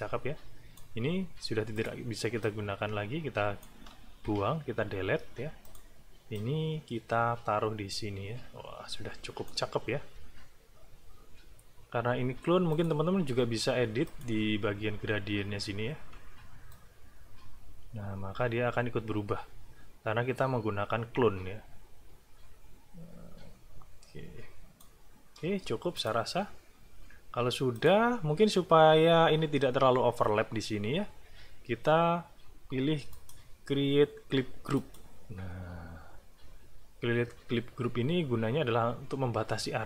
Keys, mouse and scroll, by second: 1.7 click, 2.4-3.8 drag, 4.2 Delete, 5.6 click, 6.3-9.7 drag, 10.4 ctrl+scroll up 1, 11.1 ctrl+scroll up 1, 12.7 click, 14.1 click, 14.9 ctrl+scroll up 2, 15.7 ctrl+scroll down 1, 16.7-25.0 drag, 25.4 space, 25.9 click, 27.7 click, 33.1 click, 34.8 click.